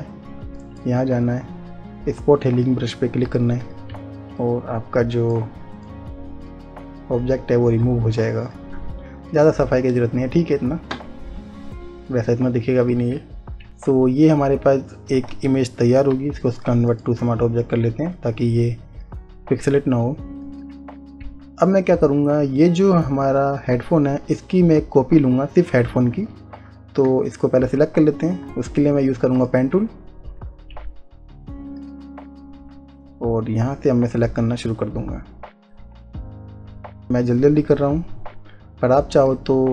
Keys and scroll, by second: 15.8 space.